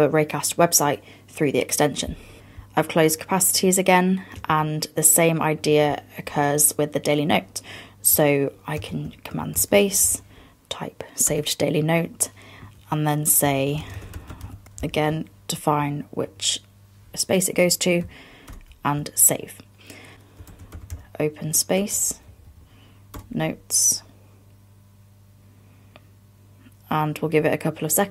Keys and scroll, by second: 4.5 super+Tab, 8.8 super+space, 14.7 fn+Down, 18.5 super+Return, 20.1 super+space, 22.3 fn+Down.